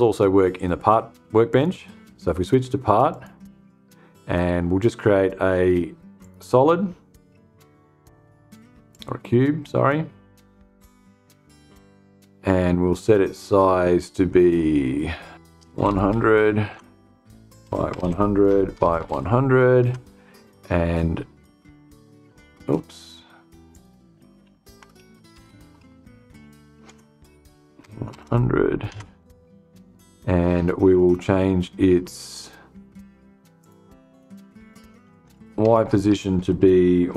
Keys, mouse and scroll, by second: 0.9 click, 2.5 click, 5.7 click, 8.4 click, 10.3 click, 14.9-16.1 typing, 14.9 click, 16.1 Tab, 17.1-18.9 typing, 19.3 Tab, 22.1 click, 23.2 click, 24.4 Left, 24.8 BackSpace, 26.3 Tab, 27.3 1, 27.6 0, 28.4 Tab, 33.0 click, 34.7 Left, 35.2 BackSpace, 36.8 5.